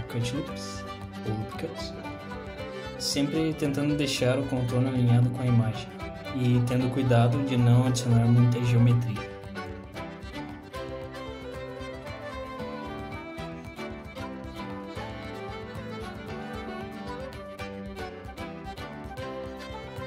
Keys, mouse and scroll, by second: 0.4 e, 4.0 g, 5.8 click, 6.0 g, 8.1 click, 9.5 shift+click, 9.8 e, 13.3 click, 13.4 g, 13.9 shift+click, 14.2 e, 15.8 s, 18.5 click, 19.6 ctrl+r.